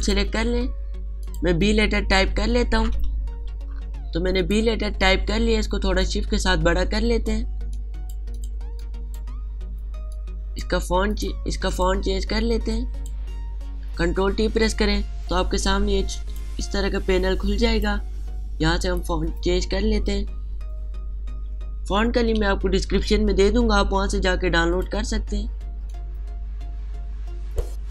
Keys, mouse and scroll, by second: 0.6 click, 2.9 n, 4.0 b, 5.0 click, 7.0 alt+shift+click, 8.7 click, 9.8 click, 11.1 click, 15.1 ctrl+t, 16.4-19.5 drag, 23.0-23.7 typing, 25.4-27.9 drag.